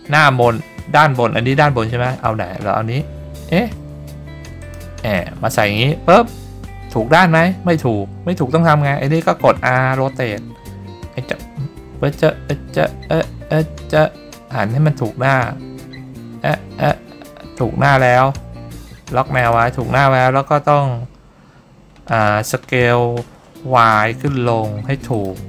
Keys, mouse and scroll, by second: 1.5 g, 4.8 click, 5.3 middle click, 9.7 r, 19.5 ctrl+click, 22.5 s, 23.9 y, 25.3 click.